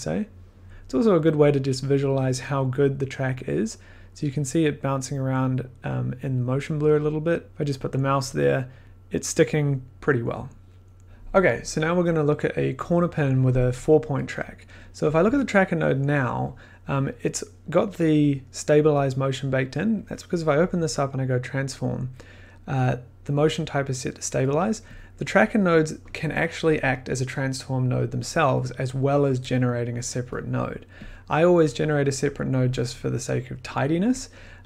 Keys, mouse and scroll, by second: 11.1 scroll, 15.1 click, 15.2 1, 16.5 click, 20.1 click, 20.3 click, 21.2 click, 21.2 click, 25.7 click, 27.7-30.6 drag, 30.7 click, 31.4 click, 32.6-34.4 drag.